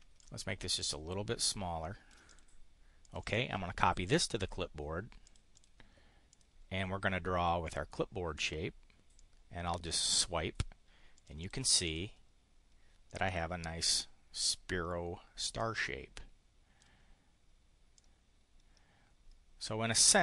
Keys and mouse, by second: 0.1-2.4 ctrl+drag, 3.0 click, 5.3 click, 5.5 click, 6.3 click, 9.2 click, 11.1 click, 11.7 click, 13.0 click, 15.5-16.9 drag, 17.9 click, 19.8-20.2 drag.